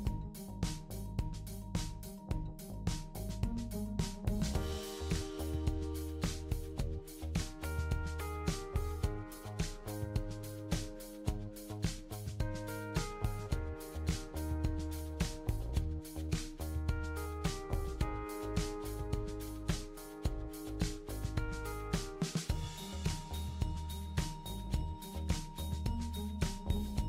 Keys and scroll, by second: 4.4 super+d, 5.6 super+d, 6.7 super+d, 7.9 super+d, 16.5 super+c, 16.7 super+v, 20.9 super+d.